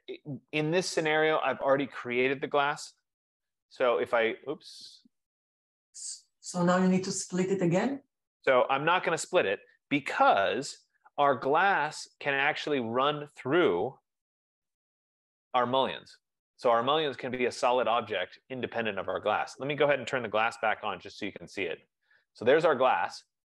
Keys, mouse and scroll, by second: 1.1 scroll down 3, 1.2 BackSpace, 2.6-5.3 typing, 6.3 click, 7.1-7.6 scroll, 7.6 scroll, 8.5 right click, 8.6 middle click, 8.9 Escape, 10.7 ctrl+z, 12.1 click, 12.8 click, 13.5-14.6 typing, 16.0-16.5 scroll, 16.9 scroll, 17.3 Delete, 17.3 click, 19.5 click, 20.5-21.9 typing, 23.1 typing.